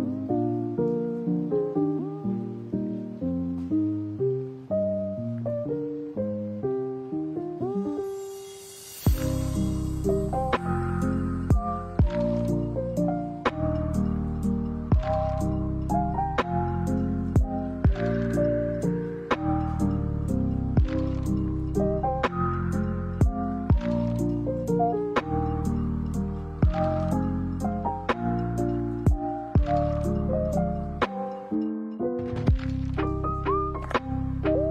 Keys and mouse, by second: 1.3 click, 4.8 click, 7.1 right click, 8.1 click, 9.4 click, 10.0 click, 10.9 right click, 12.3-13.0 drag, 13.5 middle click, 16.1 r, 24.8 ctrl+a, 26.7 alt+s, 29.9 middle click, 31.4 g, 33.1 middle click, 34.1 shift+middle click, 34.6 right click.